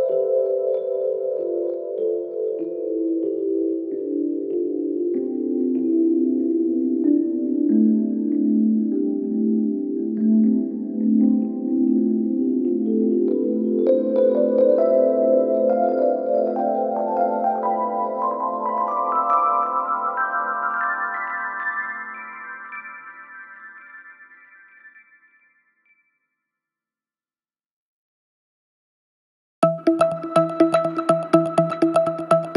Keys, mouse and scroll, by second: 16.5 click, 17.0 click, 17.3 click, 17.8 g, 19.2 click, 19.4-19.7 scroll down 2, 19.7 scroll up 1, 19.9 click, 20.3 s, 22.4 click, 22.5 scroll down 2, 22.7 scroll up 1, 22.9 click, 23.2 click, 23.5 click, 24.9 click, 25.2 scroll down 2, 26.0 s, 26.4 click, 26.6 a, 27.4 g, 28.3 click, 28.5-29.1 scroll down 1, 29.1 click, 31.1 click.